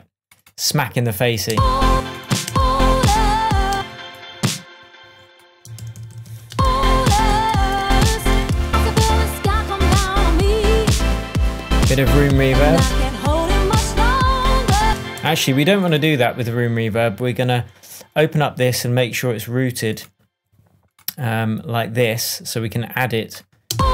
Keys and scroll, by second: 1.4 space, 3.7 space, 5.7 super+d, 6.4 super+space, 6.8 super+d, 9.8 shift+super+d, 9.9 shift+super+Tab, 14.8 space, 15.2 super+z, 23.7 space.